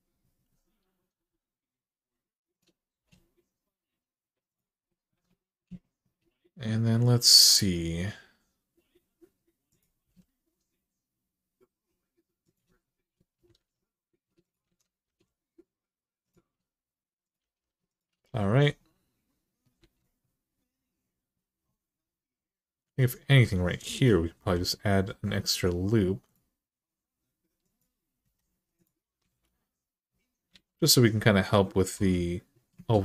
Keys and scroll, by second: 2.8 g, 9.8 g, 13.3 alt+z, 14.5 alt+z, 14.8 g, 17.2 g, 19.6 alt+z, 24.1 k, 28.0 Return, 29.1 alt+z, 31.7 h.